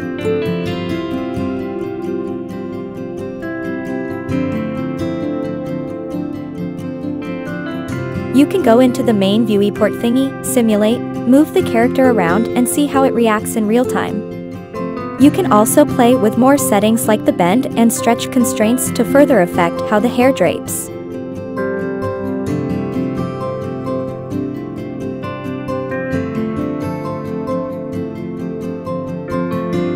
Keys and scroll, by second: 1.4 Left, 1.8 Right, 11.6 Up, 11.9 Right, 13.0 Left, 13.5 Left, 14.2 Right, 18.0 Right, 18.6 Right, 18.7 Down, 19.1 Left, 19.3 Left, 19.6 Down, 20.1 Up, 20.6 Down, 20.9 Down, 28.9-29.4 Right, 29.4 Down.